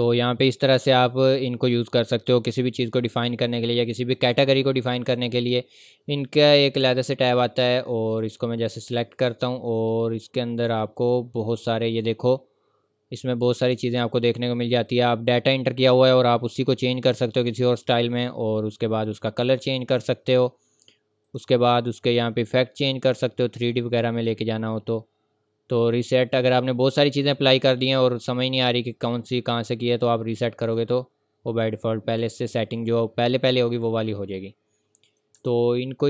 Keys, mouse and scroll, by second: 1.3-1.7 scroll down 1, 1.7 scroll up 1, 5.0 click, 14.9 click, 18.1 click, 24.2 click, 26.8-29.0 scroll down 1, 30.7 click, 33.7 click, 35.4 Delete.